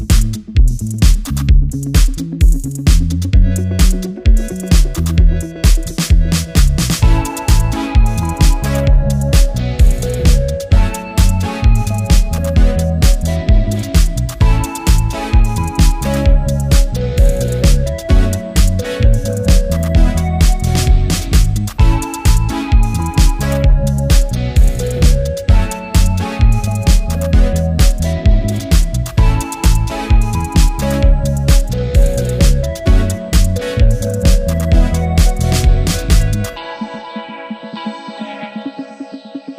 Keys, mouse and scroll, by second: 1.0 ctrl+z, 9.4 ctrl+z, 17.4 ctrl+z, 31.1 ctrl+z, 34.2 right click.